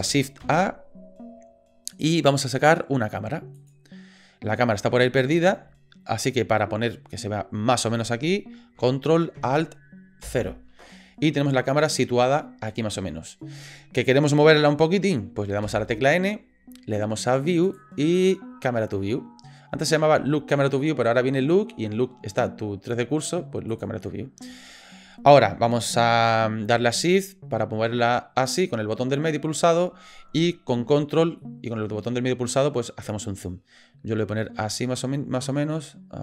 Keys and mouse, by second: 0.4 shift+a, 10.2 ctrl+alt+KP_0, 15.6 n, 23.7 click, 27.0-27.9 shift+drag, 27.9-29.8 shift+middle drag, 31.4 ctrl+click, 31.8-34.6 ctrl+middle drag, 34.8 click.